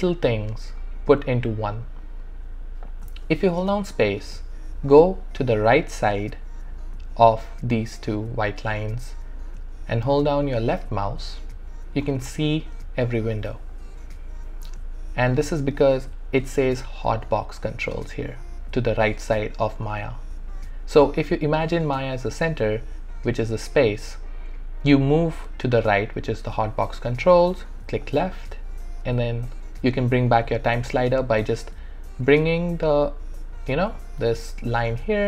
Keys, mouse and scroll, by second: 0.2 space, 2.5 space, 5.5 space, 15.7 space, 21.5 space, 26.9 space, 28.0 click, 28.9 space, 30.2 space.